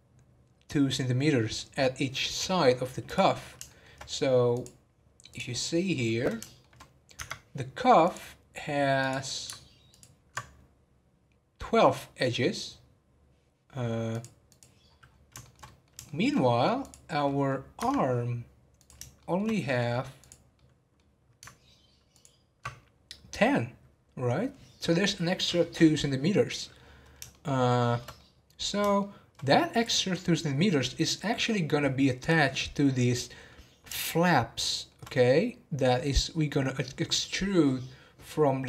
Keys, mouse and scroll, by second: 3.0 click, 3.6-4.5 shift+middle drag, 4.5-5.9 drag, 5.9-6.8 middle drag, 6.8 scroll down 2, 7.1 Tab, 8.0-9.1 drag, 9.9 ctrl+click, 14.1-14.8 drag, 14.8-15.4 scroll down 10, 15.4-16.3 shift+middle drag, 16.3 scroll up 2, 16.7 click, 17.0-17.5 middle drag, 17.5 scroll up 1, 17.7 Tab, 18.7 click, 19.2 shift+middle click, 19.5-20.2 scroll up 1, 20.2 click, 20.5-22.1 middle drag, 22.1 ctrl+click, 27.3-32.1 shift+middle drag, 33.1-37.1 middle drag.